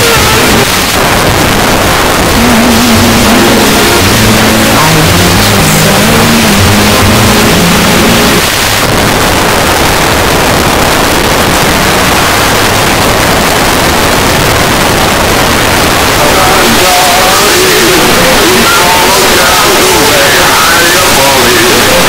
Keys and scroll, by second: 0.7 Page_Down, 8.4 Page_Down.